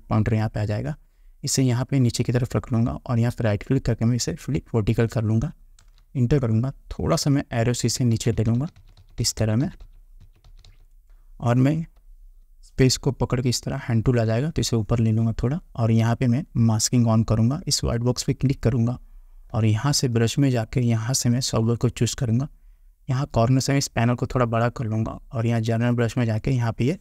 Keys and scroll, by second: 6.0 Return, 12.6 space.